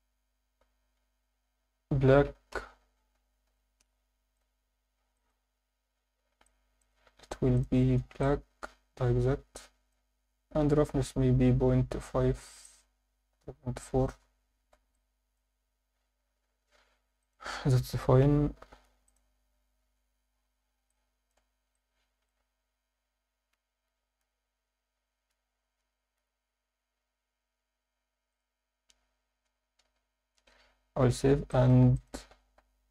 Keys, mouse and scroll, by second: 4.4 click, 6.5-6.9 alt+shift+drag, 6.5 shift+middle click, 7.5-8.3 drag, 12.6-14.1 drag, 12.6 scroll down 2, 14.5 scroll down 1, 14.7 alt+a, 15.0 alt+middle click, 17.2 click, 20.9-21.3 middle drag, 21.7-22.3 alt+shift+middle drag, 28.4 click, 29.9 KP_7, 30.3-30.9 scroll down 4, 31.1 ctrl+s, 31.5 alt+shift+middle drag, 32.0 ctrl+alt+middle click.